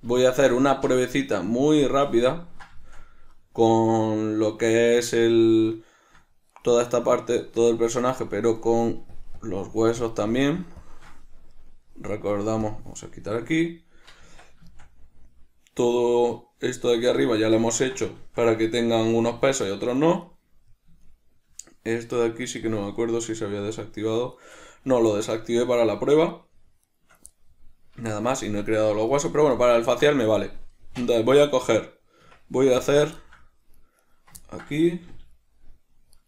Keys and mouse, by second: 1.5-2.6 drag, 2.6-6.8 ctrl+middle drag, 6.8 right click, 8.3 right click, 9.4 shift+click, 9.7 shift+click, 10.0 shift+click, 10.6 shift+click, 10.8 shift+click, 11.0 shift+click, 11.8-12.9 middle drag, 12.9 click, 14.5 Tab, 15.0-20.5 shift+middle drag, 20.5 right click, 21.0-22.9 middle drag, 22.9 click, 24.7 shift+right click, 25.0-26.6 middle drag, 26.6 shift+right click, 27.6-34.3 middle drag, 32.5 Tab, 34.3 right click, 34.7-36.2 ctrl+middle drag, 35.4 g.